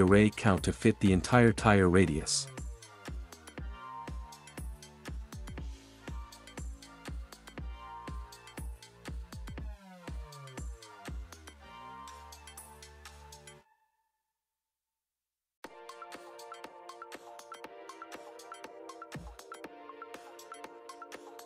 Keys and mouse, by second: 0.5 click, 2.7 click, 4.0-6.6 middle drag, 8.3 click, 10.5 click, 11.2 click, 12.2 click, 13.6 r, 13.9 y, 16.7 click, 19.3 click, 21.0-21.4 drag.